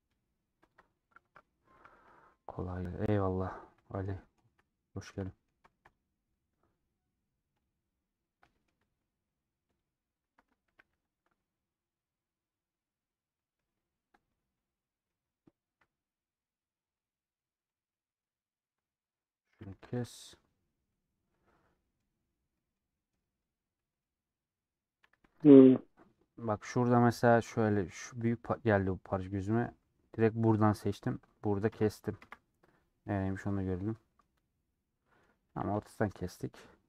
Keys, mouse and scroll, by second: 0.7 ctrl+click, 1.1-1.6 scroll down 4, 1.6 scroll up 1, 1.6 middle click, 2.2 scroll down 1, 2.3 shift+middle click, 3.1-3.5 scroll down 7, 3.5 scroll up 3, 3.6 scroll down 4, 3.8 shift+middle click, 4.7 scroll down 1, 5.0 shift+middle click, 5.2 scroll up 1, 5.3-6.3 middle drag, 6.3-7.0 scroll up 5, 7.0-7.7 scroll down 2, 7.7 click, 8.4-9.9 middle drag, 9.9 ctrl+click, 10.8 a, 15.0 middle click, 15.7 KP_Decimal, 16.3 scroll up 1, 16.3-16.9 scroll down 8, 16.9-18.9 middle drag, 18.9 click, 19.6 a, 20.0 u, 25.6 alt+click, 29.3-31.0 middle drag, 32.2 KP_0, 32.9 scroll down 1, 33.1 middle click, 33.7 scroll down 1, 33.7 middle click, 34.3-34.8 scroll down 3, 34.8 middle click, 35.6 a.